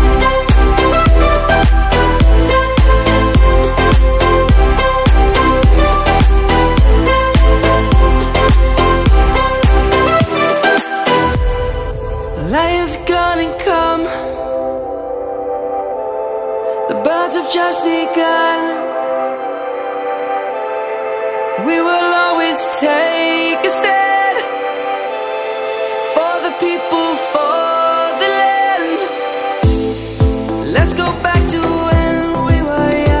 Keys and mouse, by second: 0.5 shift+middle click, 5.7 z, 6.9 click, 7.3 middle click, 9.2 right click, 9.6 s, 10.7 y, 11.3 click, 12.8 middle click, 14.3 s, 15.6 middle click, 16.1 ctrl+z, 16.3 ctrl+z, 16.5 ctrl+z, 18.1 s, 19.3 click, 19.8 middle click, 22.6 click, 25.3 s, 27.9 click, 29.1 middle click.